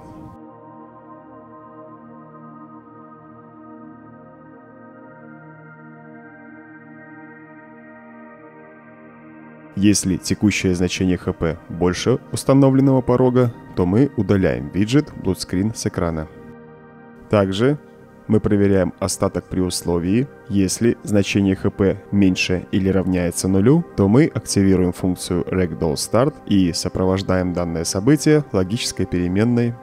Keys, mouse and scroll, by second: 2.6-3.7 right drag, 4.3-5.4 right drag, 17.8-18.8 right drag, 24.1 right click, 24.9 click, 25.9 click, 28.2 click, 28.7-29.1 right drag.